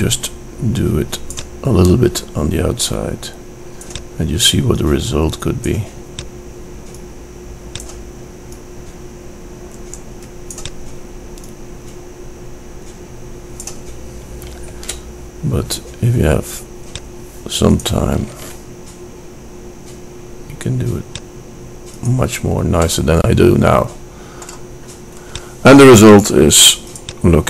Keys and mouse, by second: 1.4-3.1 drag, 3.5 middle click, 4.0-5.0 drag, 5.9 middle click, 6.3 click, 9.6-10.7 middle drag, 12.5-13.6 middle drag, 14.2 shift+d, 17.7 shift+d, 22.2 middle click, 25.4-27.0 middle drag.